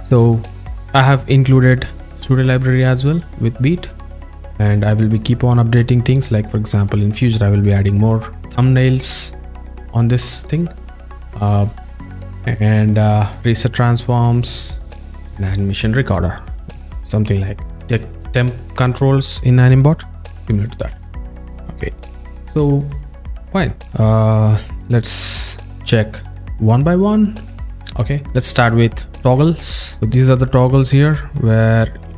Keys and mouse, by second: 3.4 click, 4.3 click, 4.9 click, 10.4 click, 12.3 click, 13.4 click, 14.6 drag.